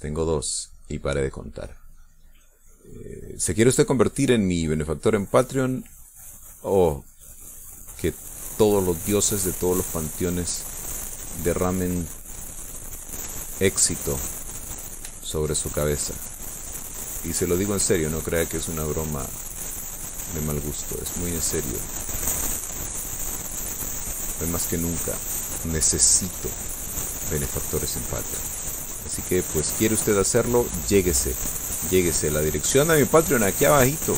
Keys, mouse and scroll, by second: 1.9-6.7 drag, 6.7-9.8 drag, 12.9 click, 14.1-15.2 shift+middle drag, 15.9 shift+click, 16.5-18.4 shift+drag, 18.8 shift+click, 19.4-21.2 shift+drag, 21.7-27.3 drag, 27.6 click, 29.1-30.4 drag, 31.0 middle click, 32.5-34.1 drag.